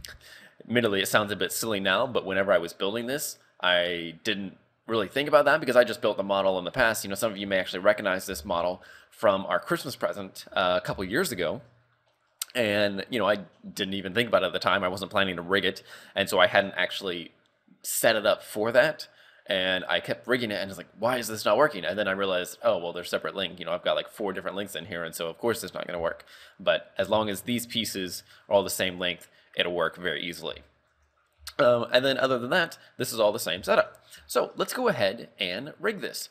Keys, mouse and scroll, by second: 0.6-1.7 scroll down 2, 1.7-2.3 scroll up 5, 2.4 scroll up 2, 5.8-7.1 scroll down 1, 7.1-7.7 scroll down 2, 7.7 right click, 7.7-8.6 scroll down 3, 8.3 z, 8.6 shift+middle click, 8.9 shift+scroll up 1, 9.0 scroll down 2, 9.3 middle click, 11.0 KP_3, 11.5 shift+middle click, 11.9-12.5 scroll up 7, 12.6 shift+middle click, 13.1 scroll up 2, 14.4-14.9 scroll up 3, 15.4 right click, 16.2 scroll down 2, 21.9-22.8 scroll down 1, 22.8-24.5 scroll down 1, 24.5 scroll down 1, 26.2 shift+middle click, 26.6-27.6 scroll up 2, 30.4-31.8 scroll down 5, 30.7 shift+middle click, 31.6 shift+middle click, 32.0-32.4 scroll up 2, 32.5 right click, 33.3 scroll down 3, 33.7 shift+middle click.